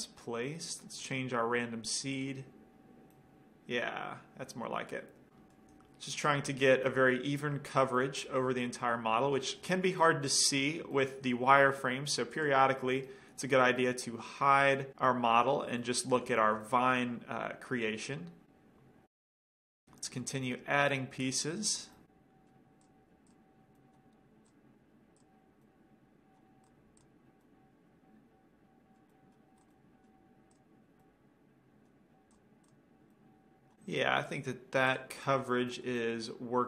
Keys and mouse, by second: 1.2-3.0 drag, 3.4-4.0 drag, 3.4 right drag, 3.9 right click, 4.0-6.5 middle drag, 6.5-7.0 right drag, 7.0-7.6 drag, 7.0-7.6 middle drag, 12.5-13.7 drag, 13.7-16.8 middle drag, 18.5-18.9 middle drag, 19.5-19.9 middle drag, 19.9-21.2 right drag, 22.1 middle click, 23.9 middle click, 27.3-28.2 middle drag, 29.2-30.5 middle drag, 30.6 click, 31.1-31.8 middle drag, 32.4-33.8 middle drag, 34.0 middle click, 36.3-36.6 drag.